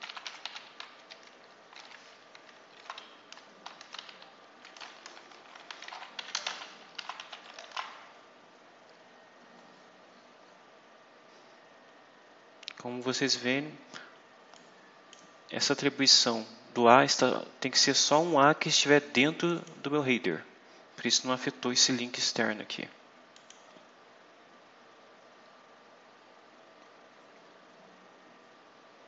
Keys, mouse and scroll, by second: 0.0-1.3 typing, 2.6 shift+3, 3.0 shift+Right, 5.5-8.0 typing, 8.9-10.6 scroll down 10, 14.4 click, 19.2 click, 23.2 click, 25.0 scroll down 2, 26.6-27.2 scroll up 2.